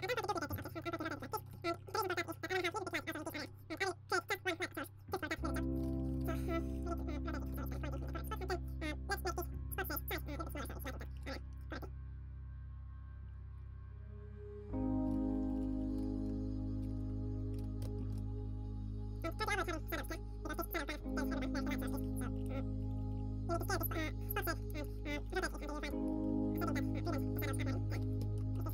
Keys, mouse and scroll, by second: 0.6 shift+d, 0.6 r, 1.2 ctrl+s, 1.2 g, 5.9 ctrl+s, 5.9-9.6 middle drag, 9.6-11.1 drag, 11.1 ctrl+s, 11.1 middle click, 11.1 KP_0, 11.5 shift+z, 13.3-15.1 drag, 15.1 shift+z, 15.1-21.8 middle drag, 17.3 ctrl+s, 17.3 g, 17.9 KP_0, 21.8-23.5 drag, 22.0 shift+z, 22.3-28.7 middle drag, 23.5 r, 24.8 g, 25.7 r, 25.7 g, 26.7 r, 27.5 g.